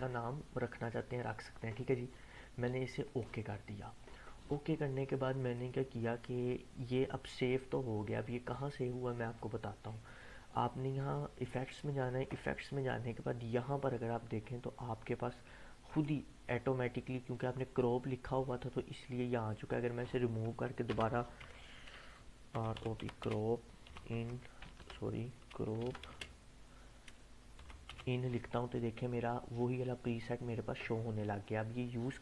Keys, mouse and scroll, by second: 5.5-9.0 drag, 11.6 click, 12.5-14.9 scroll up 1, 15.9 click, 19.7-20.3 click, 20.9-24.7 typing, 26.1 space, 27.4-28.4 typing.